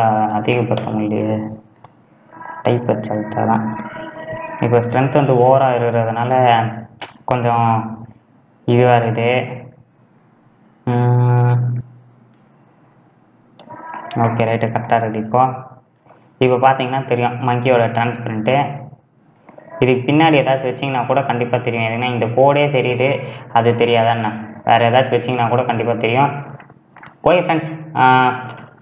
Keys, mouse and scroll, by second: 2.5 scroll down 4, 3.0-4.5 middle drag, 4.5-5.2 scroll up 3, 6.2 click, 7.4 click, 7.6 middle click, 8.2-9.4 scroll up 2, 9.4-12.6 drag, 14.8-15.2 scroll down 3, 15.2-16.4 middle drag, 16.4 scroll up 3, 17.1 scroll up 2, 17.3 middle click, 18.1 scroll down 4, 18.8-24.6 middle drag, 24.6 click, 26.0-28.8 right drag.